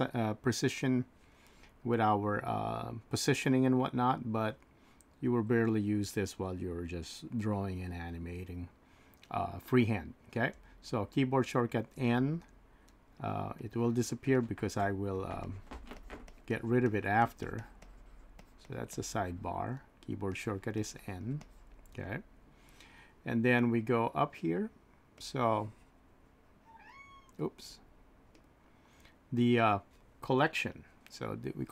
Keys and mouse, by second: 10.5 n, 12.0 n, 13.6 click, 14.3 typing, 15.4 click, 16.2-21.9 drag, 21.9 n, 25.2-26.6 drag.